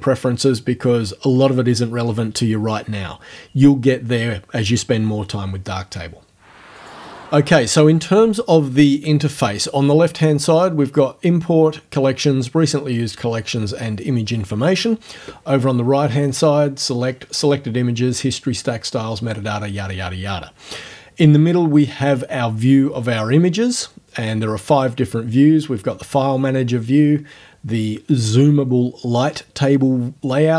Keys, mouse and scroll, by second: 6.8 click.